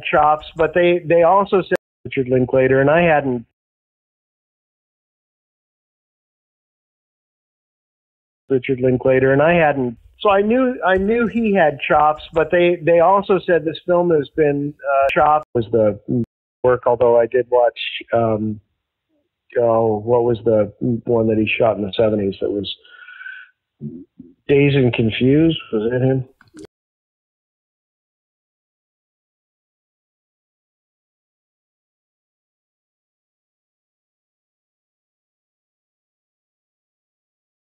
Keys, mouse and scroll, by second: 1.6 space, 1.9 click, 2.0 space, 4.5 space, 5.0 click, 6.1-7.8 drag, 8.3 click, 8.3 space, 14.7 ctrl+z, 15.1 ctrl+z, 15.3 ctrl+z, 16.1 space, 16.5 click, 16.6 space, 26.6 space, 28.4 click, 31.5 click, 32.5-36.2 typing.